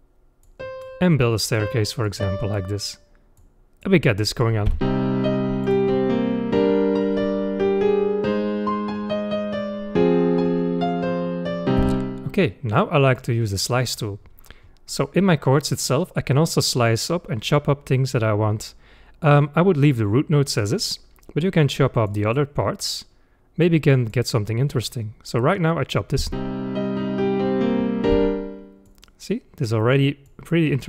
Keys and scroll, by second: 4.8 space, 11.8 space, 26.3 space, 28.1 space.